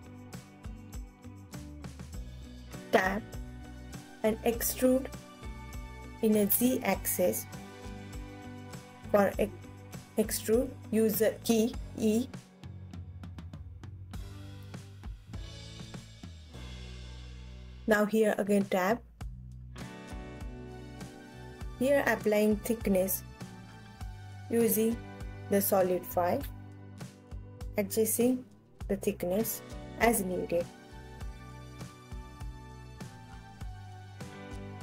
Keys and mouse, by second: 1.0 Tab, 2.9 a, 4.6 e, 15.8 Tab, 17.3 middle click, 18.1 click, 18.9 Tab, 19.8 a, 21.2-22.7 drag, 23.9-27.2 drag, 29.1-31.7 alt+middle drag, 31.7-32.9 alt+drag, 32.9 Tab, 33.3 click, 34.3 ctrl+s.